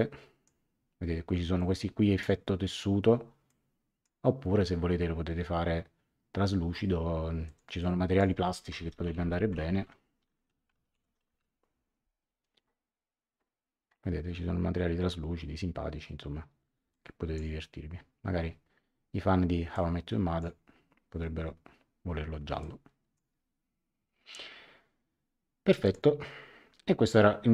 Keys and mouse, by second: 1.5 click, 3.4 click, 7.4 click, 8.4-11.9 typing, 16.9 click, 19.7 click, 22.6 click, 25.8 click.